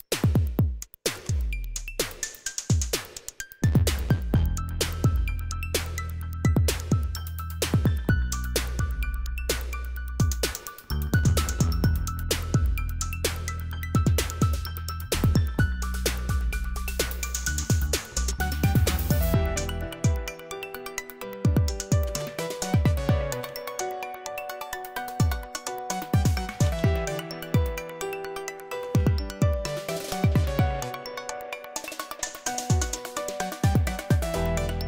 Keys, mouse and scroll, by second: 1.0 typing, 5.2 click, 9.0 click, 9.7-10.4 typing, 12.6 click, 14.1 click, 15.6 click, 18.4 click, 19.3 click, 21.2-24.5 typing, 25.9-29.3 typing, 28.6 Return, 32.1 click, 34.0 click, 34.7 typing.